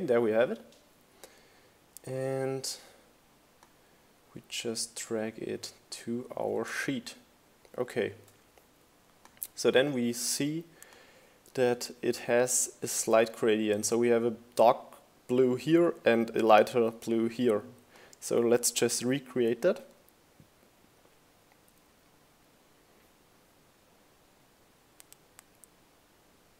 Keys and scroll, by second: 4.8 shift+Up, 6.7 shift+Up.